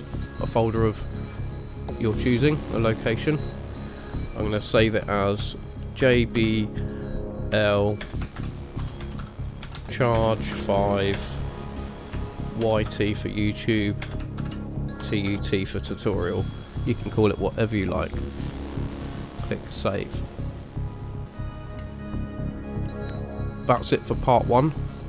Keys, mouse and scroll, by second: 23.6 scroll up 2, 24.0 shift+middle click.